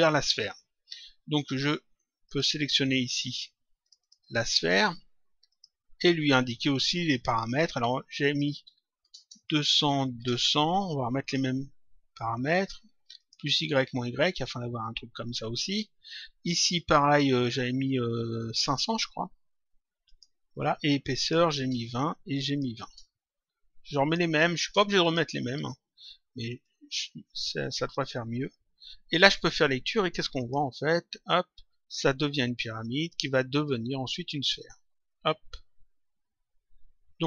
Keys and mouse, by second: 2.2 click, 3.8 click, 8.0 click, 9.4 click, 11.1 click, 13.2 click, 16.6 click, 20.0 click, 22.2 click, 23.8 click, 25.0 click, 26.6 click, 28.4 click, 30.3 click, 37.1 click.